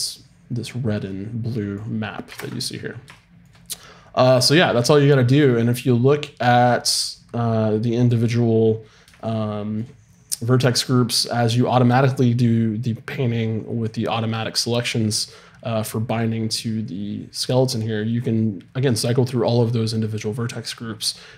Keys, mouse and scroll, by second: 2.3 shift+space.